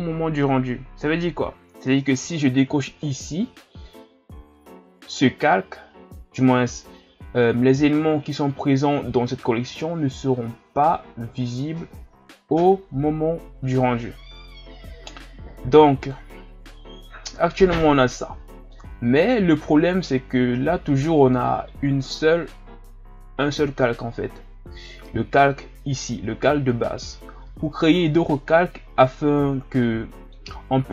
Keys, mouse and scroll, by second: 3.2 click, 16.2 click, 17.0-17.4 scroll down 3, 17.6-20.6 middle drag, 29.8-30.5 middle drag, 30.5-30.9 scroll up 3.